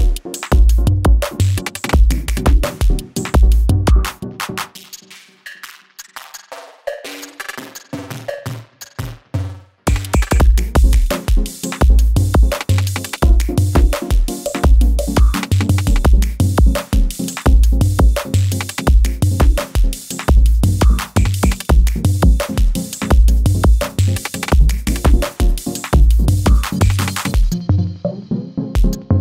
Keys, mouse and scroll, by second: 5.7 space, 7.2-7.8 click, 8.1 F9, 8.6 click, 9.7 space, 11.6-12.2 drag, 21.8-23.6 drag, 24.4 space, 27.4-28.7 alt+drag.